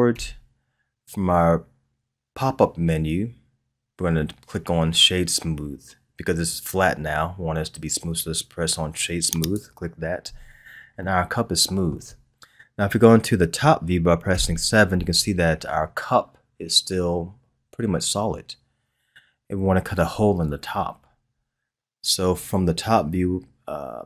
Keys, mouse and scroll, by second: 0.1 w, 10.6-11.0 scroll down 1, 11.0-14.0 middle drag, 14.3 KP_7.